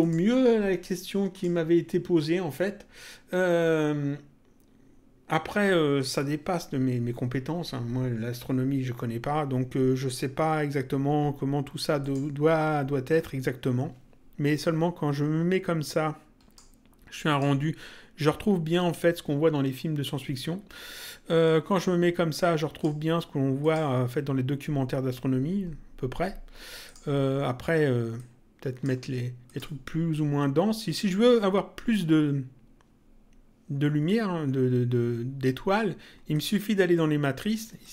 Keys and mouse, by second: 1.3 click, 11.9 click, 14.4 click, 17.2 click, 21.3 click, 23.5 click, 26.8 click, 28.1 click, 29.4 click, 36.3 click, 37.7 click.